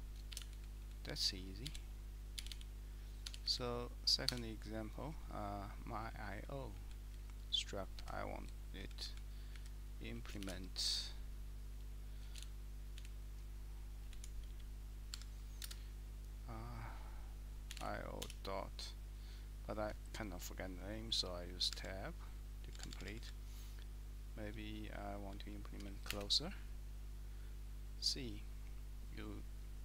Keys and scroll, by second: 0.3 shift+v, 0.5 Down, 0.8 Down, 1.6-2.5 typing, 3.3 Escape, 3.4 Up, 4.3 Escape, 5.7 Left, 6.1 Down, 6.3 Down, 6.7 Down, 7.1 Right, 7.9 Up, 8.4 Right, 8.8 Down, 9.0 Down, 9.5 Up, 10.5 :, 12.2-14.4 typing, 15.1 Tab, 15.6 space, 17.6-18.7 typing, 21.9 Tab, 22.7 Tab, 22.9 Tab, 23.1 Tab, 23.2 Tab, 25.4 shift+Tab, 26.1 Return.